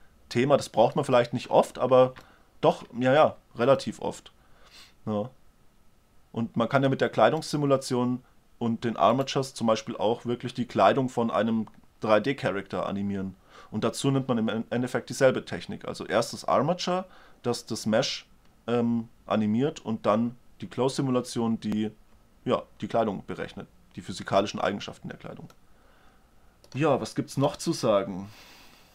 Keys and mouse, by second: 2.6-6.1 middle drag, 7.7-11.2 right drag, 25.8-26.7 middle drag.